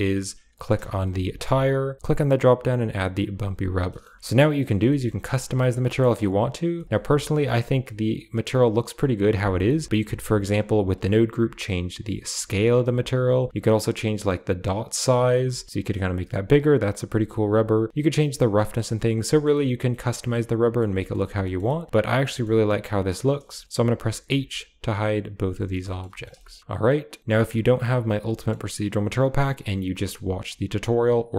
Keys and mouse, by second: 0.9 g, 2.0-3.3 drag, 3.9 middle click, 4.1 shift+middle drag, 4.9 shift+middle drag, 5.9 middle click, 6.7 shift+middle drag, 6.8-7.3 middle drag, 7.7-8.8 middle drag, 9.8 shift+click, 11.4-12.5 shift+drag, 12.8 click, 14.1 shift+click, 15.5-17.2 shift+drag, 17.5-18.5 drag, 19.2 shift+middle click, 19.4 middle drag, 19.8 shift+middle drag, 20.2-20.7 middle drag, 21.4 shift+middle click, 21.6 middle click, 22.2 middle click, 22.7 middle click, 23.6 middle click, 24.1 h, 24.7 click, 25.3 h, 25.7 shift+middle click, 26.1 middle click, 26.3 shift+middle click, 26.9 click, 27.4-31.3 drag.